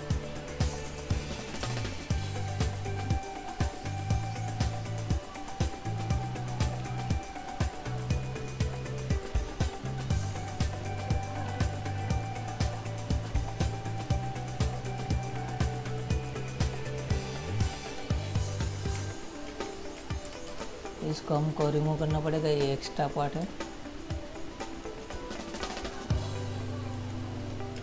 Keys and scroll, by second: 19.7 ctrl+z, 20.5 ctrl+6, 21.4 space.